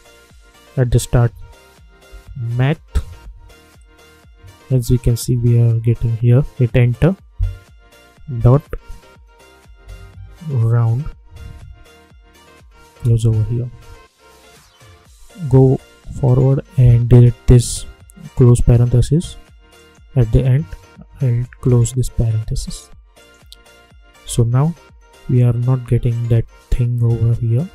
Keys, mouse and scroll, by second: 1.7-3.6 typing, 6.7 Return, 8.3 ., 9.3-10.5 typing, 12.9 Return, 15.4 Right, 19.7 click, 21.5 shift+0, 23.1 click, 24.1 space, 26.2 space, 27.6 =.